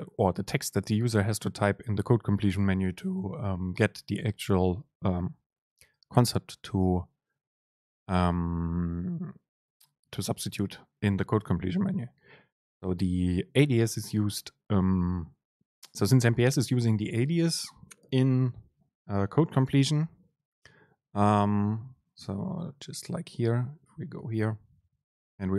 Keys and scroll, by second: 25.0 Return, 25.2 super+space.